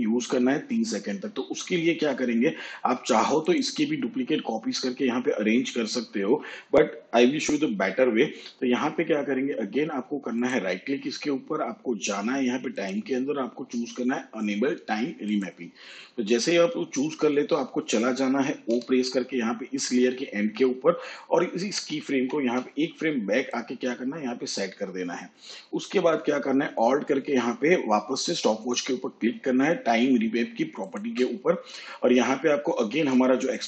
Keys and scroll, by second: 18.6 o, 22.0 ctrl+Left, 33.5 ctrl+v.